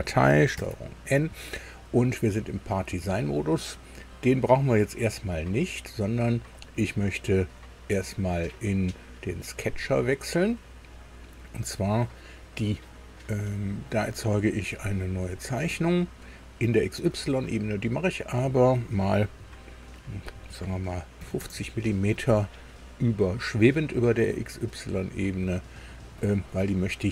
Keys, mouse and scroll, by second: 0.6 ctrl+n, 6.6 click, 9.6 click, 15.2 click, 18.1 click, 21.2 KP_5, 21.4 KP_0, 26.2 click.